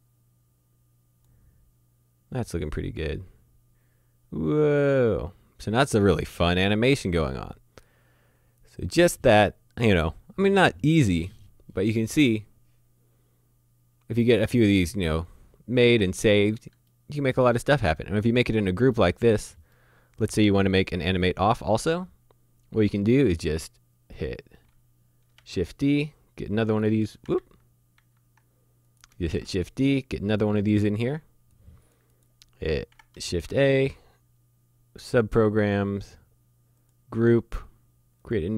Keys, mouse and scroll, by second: 15.9-16.7 scroll down 1, 16.9 shift+middle click, 17.9-18.9 scroll down 1, 18.9 middle click, 21.2 middle click, 22.9 click, 25.4 d, 26.5 click, 27.3 ctrl+z, 27.9 ctrl+z, 28.9 click, 29.3 d, 30.2 click, 33.3 a, 36.8 click, 38.3 click.